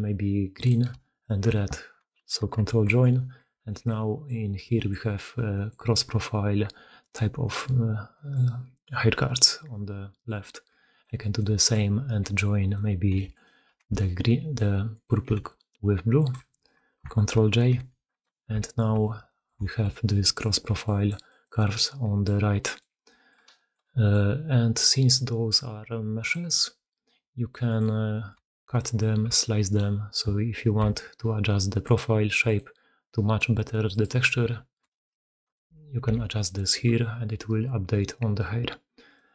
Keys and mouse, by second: 1.0 shift+click, 2.6 ctrl+j, 3.5 shift+drag, 3.8 drag, 4.9-5.4 middle drag, 5.6-6.9 middle drag, 7.5-8.0 middle drag, 8.2-9.5 middle drag, 10.1-10.7 middle drag, 11.4 shift+drag, 12.5 click, 13.2 alt+click, 13.8 shift+d, 15.1 r, 17.8 ctrl+j, 18.5-19.3 shift+middle drag, 19.5 shift+middle drag, 20.1 middle drag, 20.5-22.3 typing, 20.7 click, 21.1 click, 21.6 click, 22.3-22.7 drag, 22.9 drag, 23.9 click, 24.7 click, 28.0 drag, 28.3-28.6 shift+drag, 29.2 Tab, 29.5 click, 30.7 k, 35.5 click, 35.6-39.0 middle drag, 35.9 x, 36.6 Tab, 39.0 click.